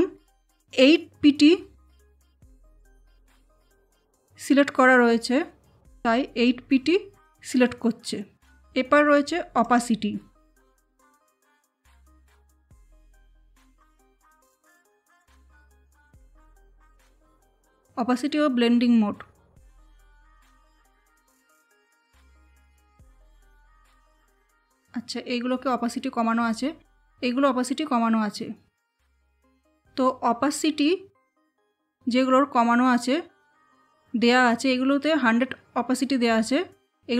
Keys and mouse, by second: 8.5 click, 11.6-15.7 drag, 16.9 click, 19.3 space, 19.4 click, 19.6 space, 22.3 click, 22.5 space, 23.4 space, 25.7 space, 33.5 click.